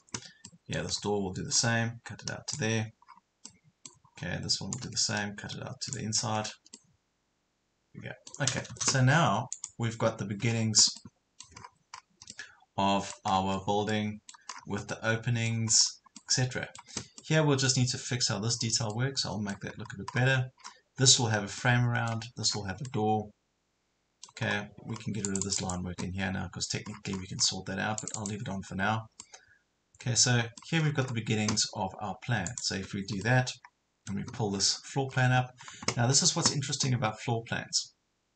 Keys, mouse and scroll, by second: 0.0 scroll down 1, 0.4 middle click, 1.0 scroll up 1, 1.6 click, 3.0 scroll down 1, 3.4 middle click, 4.1 scroll up 1, 4.8-6.4 drag, 6.4-6.8 scroll down 1, 6.8-8.4 middle drag, 9.5 space, 10.4 Escape, 10.6 scroll down 1, 11.0 middle click, 11.6 scroll up 1, 12.3 middle click, 13.3 scroll down 1, 13.9 middle click, 14.6 scroll down 1, 14.9 middle click, 15.7 scroll up 1, 16.2-18.4 middle drag, 18.6 scroll down 1, 18.9 middle click, 19.8 scroll up 1, 20.6 scroll down 1, 21.6 middle click, 22.5 scroll down 1, 22.9 middle click, 24.4 scroll up 1, 25.2 click, 26.9 scroll down 1, 27.9 scroll down 1, 28.0 click, 28.7 scroll up 1, 29.2-30.8 middle drag, 30.8 scroll down 1, 32.5 click, 33.2-34.4 middle drag, 35.2 scroll down 1.